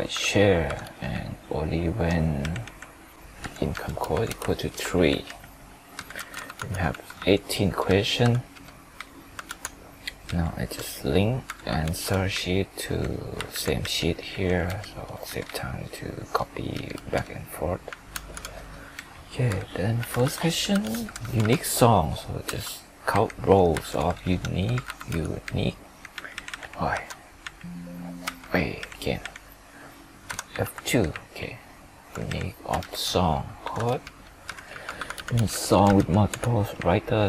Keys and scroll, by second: 4.6 ctrl+Return, 9.4 alt+Tab, 10.3 alt+Down, 11.8 alt+Tab, 13.5 ctrl+Right, 18.2 alt+Tab, 23.8 F2, 31.8 ctrl+Left, 32.8 ctrl+shift+Down.